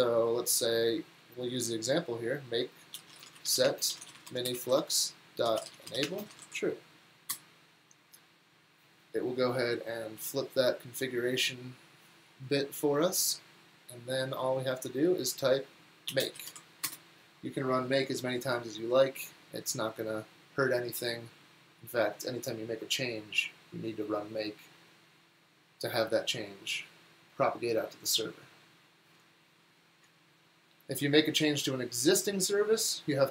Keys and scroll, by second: 2.7-7.8 typing, 15.9-17.1 typing.